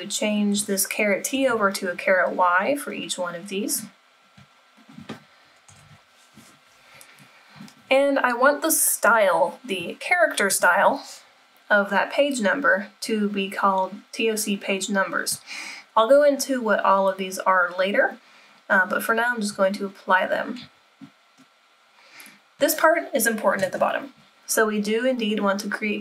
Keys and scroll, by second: 1.3 BackSpace, 5.7 BackSpace, 23.7 super+=.